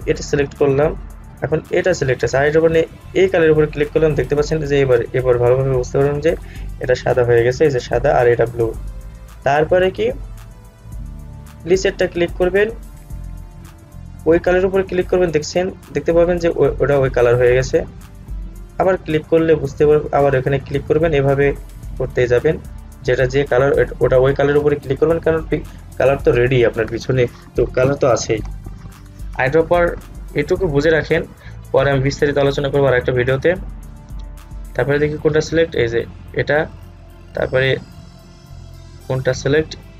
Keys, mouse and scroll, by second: 0.7 click, 3.3 click, 11.8 click, 14.7 click, 18.8 click, 34.2 click, 37.6-38.9 scroll down 1, 38.9 click.